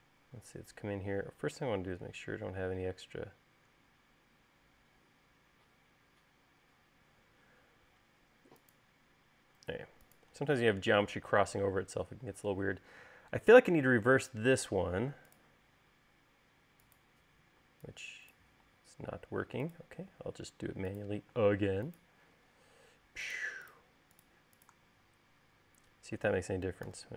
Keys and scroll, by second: 17.9 e, 19.2 l, 21.8 space.